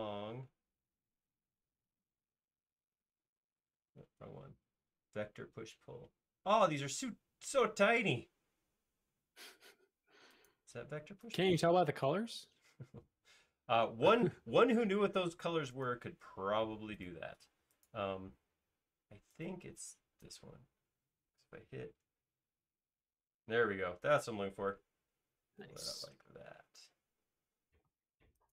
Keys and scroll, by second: 0.4 Left, 1.1 Right, 2.6 Left, 4.1 Escape, 12.8 Escape, 13.2 Escape, 14.3 space, 17.6 space, 21.9 Left, 22.9 Right.